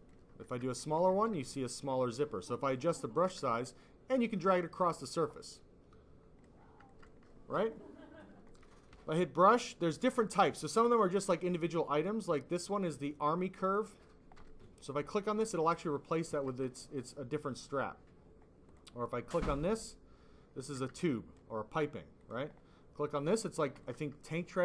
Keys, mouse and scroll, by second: 0.4 alt+click, 1.2 ctrl+z, 1.3 s, 1.4 click, 2.1 click, 3.2 alt+click, 4.1 click, 6.9 alt+click, 7.0 click, 7.2 alt+click, 8.8 b, 10.0 i, 13.6 click, 14.8 click, 16.3 alt+click, 16.7 click, 18.6 click, 19.7 click, 20.6 alt+click, 20.9 click, 21.0 click, 22.1 click, 22.2 click, 23.1 click, 23.9 alt+click.